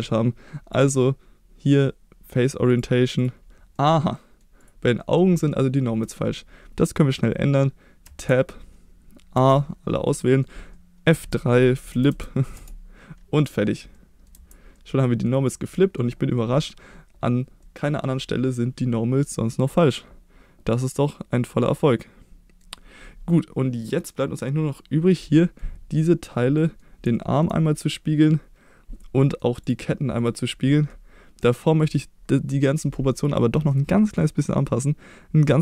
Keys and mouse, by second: 0.8-3.0 drag, 3.2-3.7 drag, 3.7-4.4 middle drag, 4.6 click, 4.9 middle drag, 5.5 shift+middle drag, 8.0 Tab, 9.3 a, 10.1 middle click, 11.2 F3, 13.4 click, 13.9 middle click, 14.3 Tab, 14.7-15.2 middle drag, 15.4 drag, 15.7 middle drag, 17.6-22.6 middle drag, 23.3-24.0 middle drag, 25.4 middle drag, 25.9 click, 26.5 middle drag, 27.1 shift+middle drag, 29.1 middle drag, 29.6-30.2 drag, 30.9-31.6 middle drag, 33.1 click.